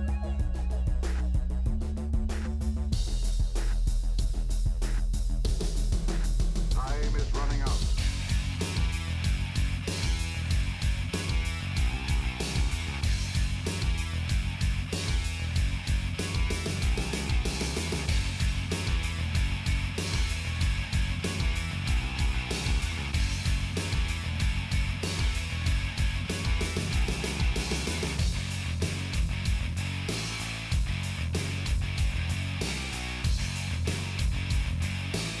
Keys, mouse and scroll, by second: 0.4 right click, 0.9 click, 1.8 middle click, 2.5 shift+click, 2.8 right click, 3.3 click, 4.1 middle click, 4.4 shift+click, 4.8 right click, 5.1 KP_4, 5.4-7.0 drag, 7.0 KP_7, 7.2 shift+middle click, 7.3 scroll up 2, 7.9 g, 9.1 click, 9.4 middle click, 9.9 shift+middle click, 10.2 g, 11.2 shift+middle click, 11.5 scroll down 1, 11.8 shift+click, 12.0 g, 13.6 KP_7, 13.8-14.1 scroll up 11, 13.9 shift+middle click, 14.1 shift+middle click, 14.5 g, 15.1 scroll down 1, 15.3 shift+middle click, 15.7 scroll down 5, 15.8 shift+middle click, 16.4 click, 16.6 shift+middle click, 16.7 scroll up 2, 16.8 shift+middle click, 17.1 g, 17.9 shift+middle click, 18.3 click, 18.5 scroll up 5, 18.7 shift+middle click, 19.0 g, 20.0-20.6 scroll down 7, 21.2 shift+middle click, 21.5 click, 21.6-22.5 scroll down 2, 22.6 scroll down 2, 22.9 middle click, 23.5 shift+click, 24.0-27.0 typing, 24.6 shift+click, 25.6 middle click, 26.1 click, 26.8 shift+click, 27.1 middle click, 29.1 ctrl+r, 30.8 click, 31.3 ctrl+r, 32.6-33.7 middle drag, 34.3-35.3 drag.